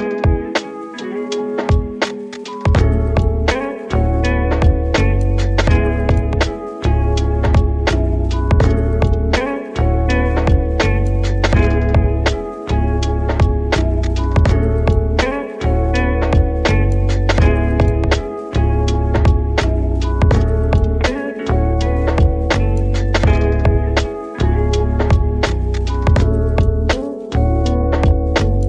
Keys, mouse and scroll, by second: 0.0 z, 0.8 click, 1.1 s, 2.3 click, 2.7 scroll up 1, 2.8 middle click, 3.4 Tab, 3.7 shift+middle click, 4.1 scroll up 2, 4.3 3, 4.7 click, 5.0 middle click, 5.3 scroll down 2, 5.5 middle click, 5.9 s, 7.9 click, 8.5 Tab, 8.8 middle click, 9.7 ctrl+3, 11.7 click, 12.6 right click, 13.3 scroll up 2, 13.6 Tab, 14.5 ctrl+r, 15.4 click, 18.9 ctrl+r, 19.2 ctrl+click, 20.3 click, 21.0-23.0 middle drag, 23.0-24.1 scroll up 4, 24.1 ctrl+r, 24.9 click, 26.2 right click, 26.6 ctrl+z, 27.4 ctrl+r, 28.0 click.